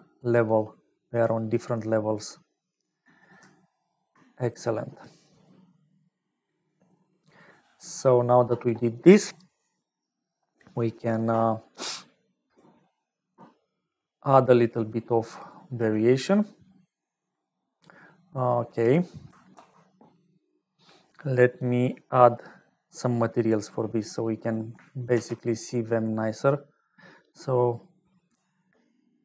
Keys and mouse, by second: 0.4-1.9 middle drag, 2.6 middle click, 6.5 middle click, 8.0 click, 11.4 middle click, 14.9 middle click, 15.7 click, 16.6 click, 19.5 ctrl+s, 21.3 click, 22.5 click, 23.1 click, 24.3 click, 25.1 shift+a.